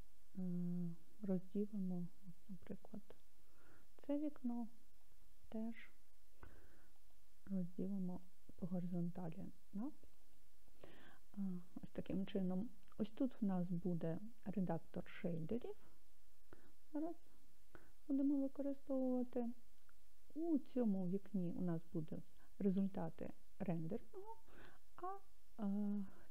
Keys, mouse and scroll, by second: 7.0-10.4 right drag, 17.2 click.